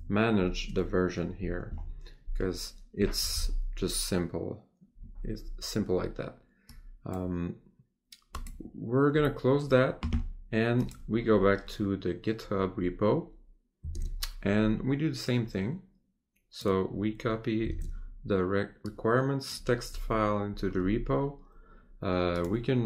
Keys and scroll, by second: 14.0 Tab, 18.0 Tab.